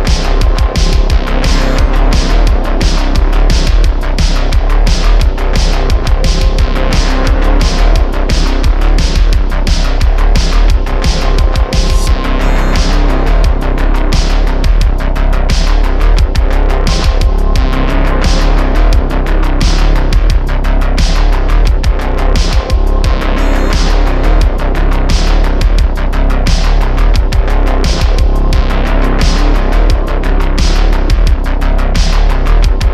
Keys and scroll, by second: 2.2 Tab, 2.7 super+r, 9.6 Tab, 14.6 /, 14.9 /, 17.1 `, 30.5 alt+shift+c.